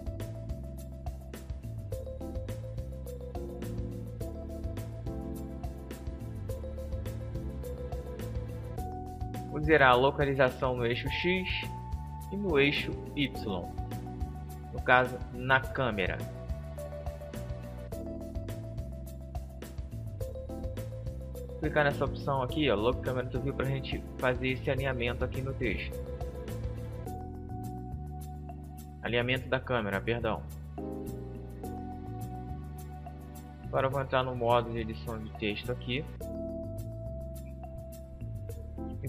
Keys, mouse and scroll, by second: 4.1-6.3 middle drag, 6.5-8.4 drag, 10.3-12.2 drag, 20.6-22.5 drag, 21.2 middle click, 22.4 middle click, 27.4 shift+f, 29.0-32.3 drag, 32.3-33.9 right drag, 33.9 Tab, 33.9-35.6 middle drag, 36.7-39.0 typing.